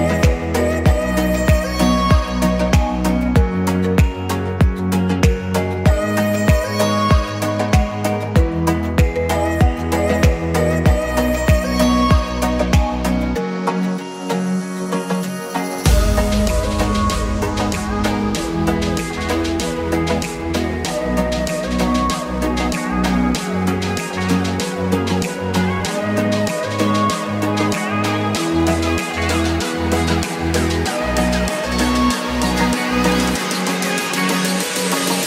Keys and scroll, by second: 13.2 BackSpace, 14.1 BackSpace, 17.7 3, 18.8 7, 19.6 6, 20.2 Return, 23.7 BackSpace, 25.2 Escape, 30.9 Escape, 34.1 3, 34.6 7, 34.9 6.